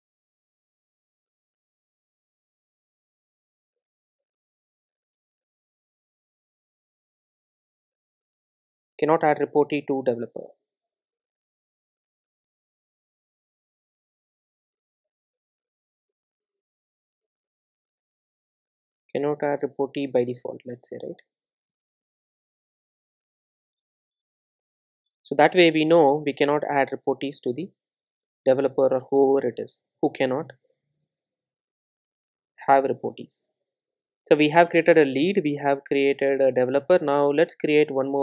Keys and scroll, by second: 25.1 super+c, 28.1 super+v, 29.4 alt+super+l, 32.7 super+s.